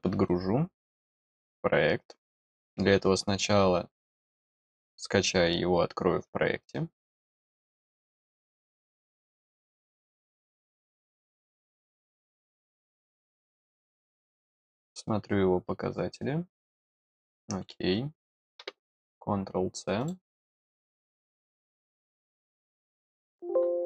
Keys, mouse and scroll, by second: 0.1 click, 7.2 click, 7.3 click, 7.8 click, 8.0 click, 8.6 click, 8.8 click, 9.2 click, 9.3 click, 10.4-12.4 drag, 12.8 click, 13.8 click, 14.6 click, 16.9 click, 19.9 click, 20.8 click, 22.8 scroll down 1, 23.0 middle click.